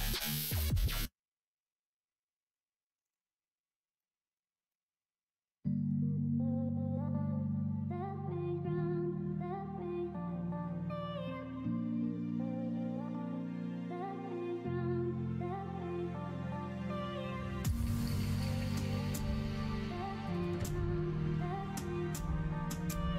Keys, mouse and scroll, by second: 3.9 middle click, 4.6-5.8 middle drag, 6.2-7.4 middle drag, 7.9 shift+d, 9.8 alt+s, 18.8 1, 19.4 click, 20.3 click, 21.2 shift+click, 22.1 f, 22.6 middle click.